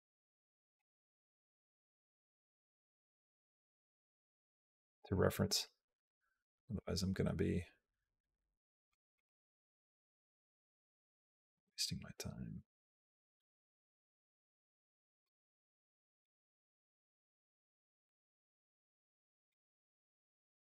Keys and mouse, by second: 1.0 g, 2.7 r, 4.6 click, 5.2-8.7 drag, 9.0 click, 9.5-15.0 drag, 16.1 click, 17.9 g.